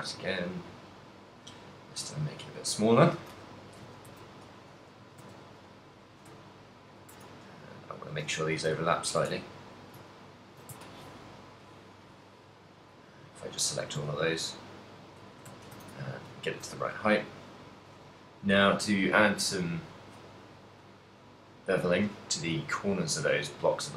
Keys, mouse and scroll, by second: 1.6 click, 2.3 middle click, 3.3-6.1 typing, 6.1 click, 7.2 shift+click, 7.2 a, 7.5 l, 8.1 l, 8.9 g, 9.2 shift+click, 9.6 Tab, 9.7 right click, 10.2 ctrl+middle click, 11.1 ctrl+click, 11.5 ctrl+click, 11.8 ctrl+click, 13.4 ctrl+middle click, 13.8 g, 15.5 shift+click, 15.5 z, 15.8 a, 16.1 shift+middle click, 16.4 ctrl+middle click, 17.2 right click, 17.4 middle click, 18.5 middle click, 20.0 click, 20.9 click.